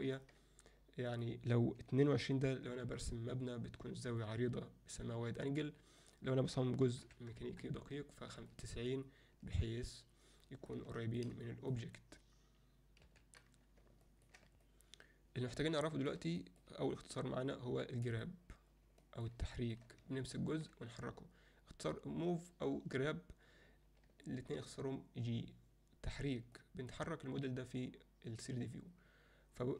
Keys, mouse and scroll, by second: 1.1-2.7 drag, 2.2 2, 4.2-5.4 alt+middle drag, 6.1-7.4 drag, 8.5-10.7 alt+middle drag, 10.9 shift+middle drag, 11.5 middle click, 13.1 n, 14.0 ctrl+alt+middle click, 14.7-15.7 alt+middle drag, 15.9 shift+middle drag, 16.4 alt+middle click, 18.1 click, 19.0 alt+middle drag, 19.6 alt+shift+middle click, 20.3 ctrl+alt+middle click, 24.3 ctrl+middle click, 26.7 ctrl+alt+middle click.